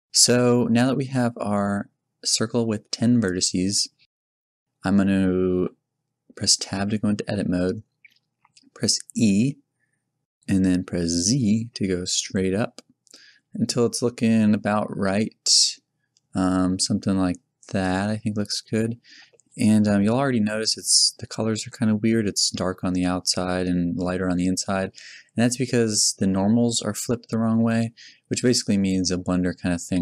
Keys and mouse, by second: 5.5 Tab, 9.1 e, 17.9-18.9 middle drag, 25.7 Tab.